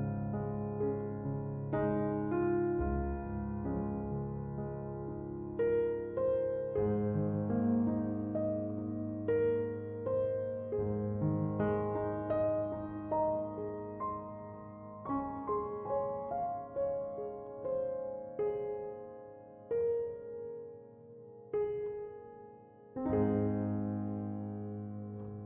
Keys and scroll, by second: 6.5 1, 6.9 0, 7.6 Return, 12.8 1, 13.7 0, 14.1 Return, 23.9 3, 24.1 Return.